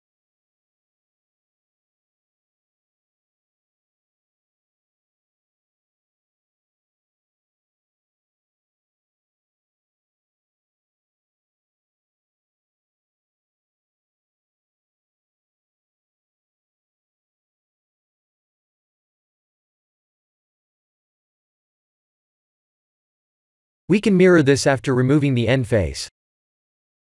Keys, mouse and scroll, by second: 0.4 shift+middle click, 3.5 click, 4.8 ctrl+z, 5.7 click, 6.9 ctrl+z, 7.4 click, 9.6 ctrl+z, 11.5 middle click, 12.7-13.3 scroll down 1, 13.3-14.5 scroll down 3, 14.5 Tab, 14.5 scroll down 2, 15.5 Tab, 16.4 ctrl+r, 20.9 ctrl+r, 23.7 ctrl+r, 26.1 middle click.